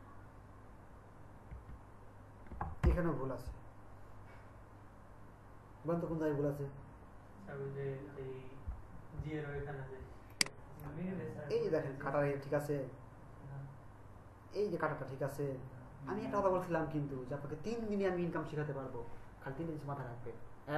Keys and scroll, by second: 1.7 Right, 2.8 Left.